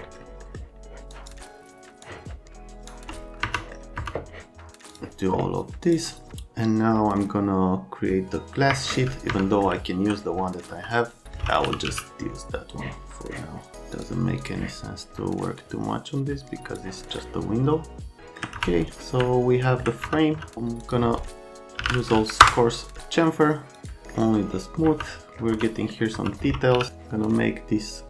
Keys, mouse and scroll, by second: 0.4 scroll up 1, 1.1 click, 2.0 click, 3.4 F3, 3.4 right click, 4.0 F3, 4.9 click, 5.8 click, 8.7 Escape, 9.1 right click, 9.3 F3, 9.6 middle click, 10.7 F3, 11.2 right click, 11.4-12.4 typing, 13.9 click, 14.4 click, 15.6 click, 17.0 middle click, 18.2 alt+middle click, 18.6 F3, 19.2 alt+middle click, 20.0 F3, 20.3 F3, 21.5-22.4 typing, 22.4 Return, 23.8 click, 24.0 middle click, 24.8 F3, 25.5 F3, 26.1 F3, 26.7 f.